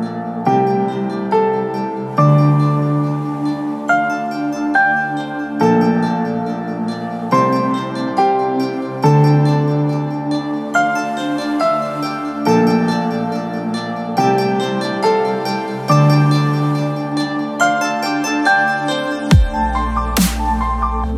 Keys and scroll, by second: 1.3 j, 3.1 space, 13.0 ctrl+KP_0, 17.0 s, 20.5 j.